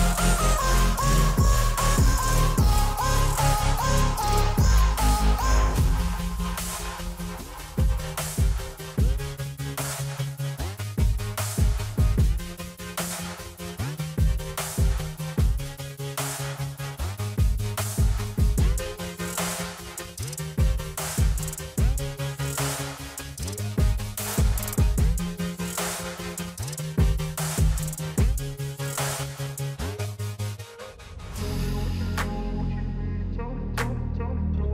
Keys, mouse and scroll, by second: 3.3 space, 3.4 click, 5.3-9.7 drag, 9.7 space, 9.8 click, 11.2 alt+scroll up 1, 12.2-14.3 drag, 15.2-18.0 alt+drag, 18.0-18.4 alt+scroll down 1, 18.9 alt+scroll down 1, 20.7 click, 22.6 click, 25.0 click, 31.0 click.